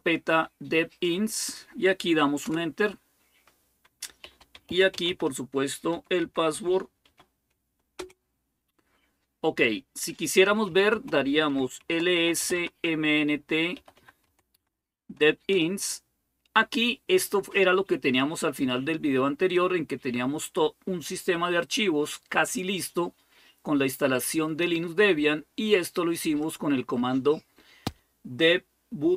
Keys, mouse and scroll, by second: 2.3 Return, 3.8-7.3 typing, 7.8 Return, 10.0-14.0 typing, 14.3 Tab, 15.3 Return, 16.0-16.7 typing, 19.3-22.8 drag, 26.2 click.